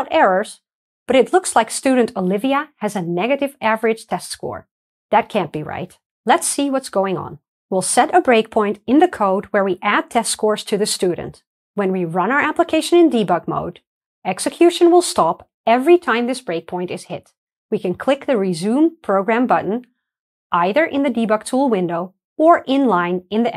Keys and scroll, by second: 9.6 super+F8, 12.2 ctrl+d, 12.2 shift+F9, 19.5 alt+super+r, 19.5 F9.